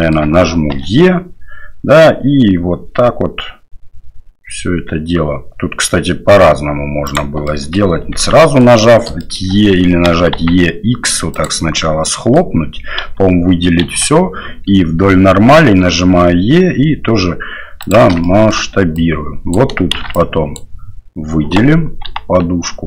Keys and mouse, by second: 0.7 e, 7.6 middle click, 8.1 ctrl+z, 8.3 middle click, 9.2 shift+middle click, 10.0 e, 12.1 middle click, 13.0 a, 13.8 KP_3, 15.8 e, 18.3 shift+middle drag, 18.9-19.5 drag, 19.9 shift+z, 20.1-20.5 drag, 22.0 g.